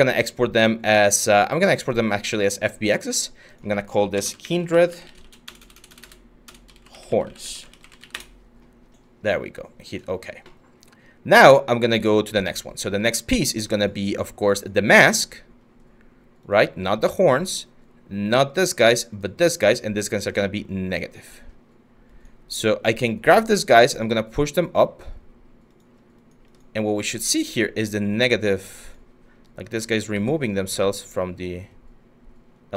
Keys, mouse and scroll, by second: 3.6-8.1 typing, 11.3-12.8 typing, 29.7 w.